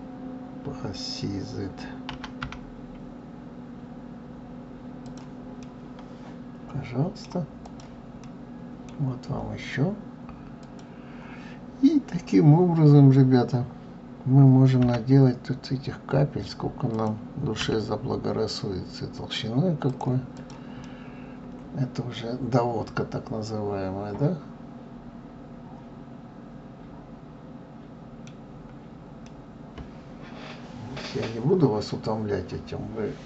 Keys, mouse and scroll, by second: 5.6-7.6 middle drag, 7.6 click, 8.2-9.2 middle drag, 9.2-9.6 scroll up 1, 10.6 click, 20.3 click, 20.8-23.8 middle drag, 28.4-29.2 scroll down 4, 29.2-32.2 middle drag.